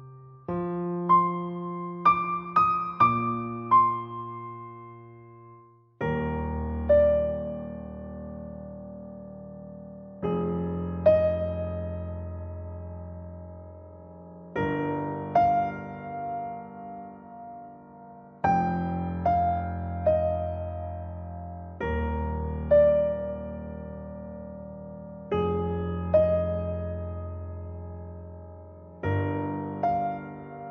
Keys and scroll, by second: 25.5 ctrl+z.